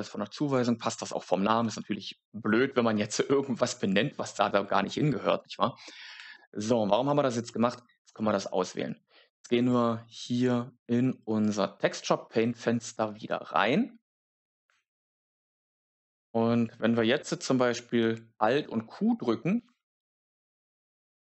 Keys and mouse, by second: 0.4 click, 10.4 click, 19.5 alt+q, 20.9 alt+q.